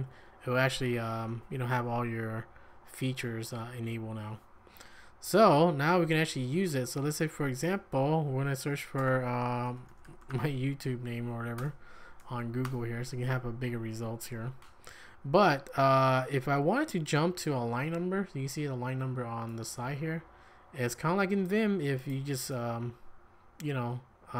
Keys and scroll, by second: 6.2 j, 6.4 j, 6.6 j, 7.6 Tab, 9.0 Return, 9.0-11.0 typing, 11.6 Return, 12.6 Tab, 15.0-15.9 typing.